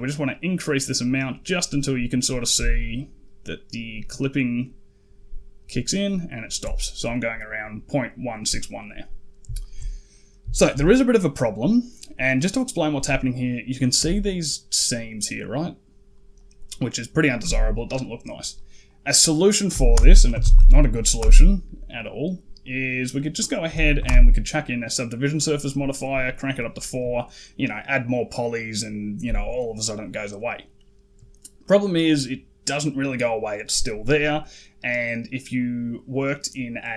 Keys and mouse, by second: 8.7 middle click, 9.4 shift+middle drag, 9.9 middle click, 10.4 shift+middle drag, 11.6 middle click, 13.8 d, 14.0 click, 14.8 d, 14.9 d, 15.0 d, 15.2 click, 16.2-17.2 drag, 18.4 click, 18.7-21.1 drag, 22.4-24.1 drag, 29.4 middle click, 30.3 middle click, 31.5 middle click, 35.4 click.